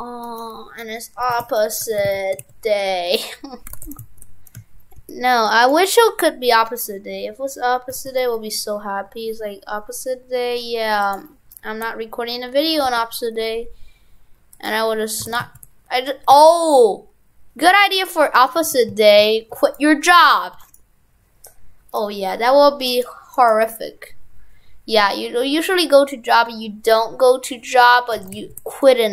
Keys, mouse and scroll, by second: 3.8 shift+f, 15.3 shift+f, 18.4 right click, 18.6 shift+f, 20.1 right click, 28.2 shift+f.